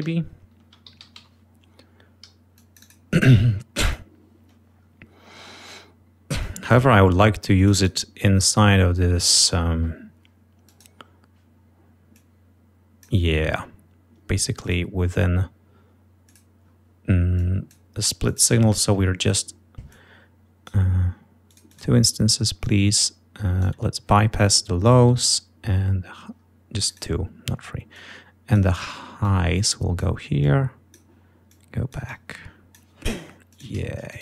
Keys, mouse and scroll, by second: 0.0-1.6 typing, 2.5 click, 3.8 click, 6.4 click, 7.5 click, 10.6 click, 12.1-13.2 drag, 14.6 right click, 16.2 click, 17.4 click, 18.2 click, 19.9 click, 21.5 click, 22.6-23.8 drag, 26.8 click, 27.9 click, 29.2 click, 30.4 click, 31.5-32.9 drag, 33.5 click, 34.1 click.